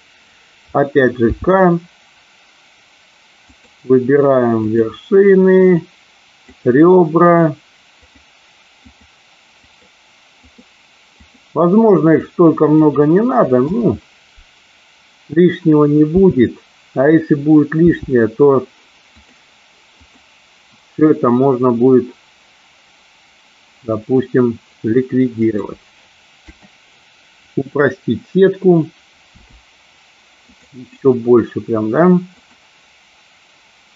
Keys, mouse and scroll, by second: 1.2 k, 16.2 k, 29.3 k.